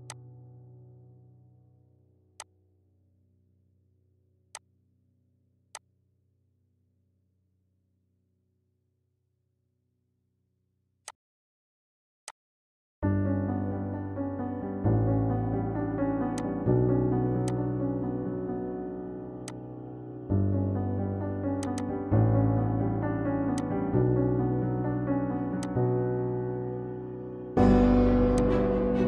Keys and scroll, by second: 8.0 f, 8.1 o, 9.3 Return.